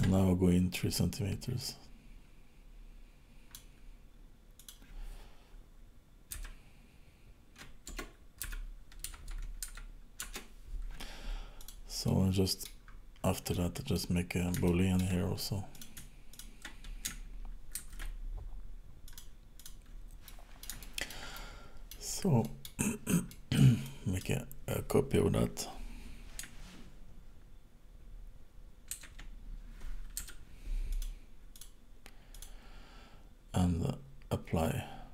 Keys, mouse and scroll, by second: 0.2-1.2 scroll up 3, 1.6 click, 11.6 click, 12.0 middle click, 12.8-13.5 scroll down 9, 13.5 middle click, 14.6 shift+middle click, 15.7 click, 16.4 shift+click, 17.8 ctrl+shift+b, 19.6 click, 20.3 middle click, 20.9 shift+middle click, 21.4 middle click, 22.5 middle click, 22.9 scroll down 2, 23.3 middle click, 23.9 click, 29.0 shift+d, 31.5 click, 32.4 click.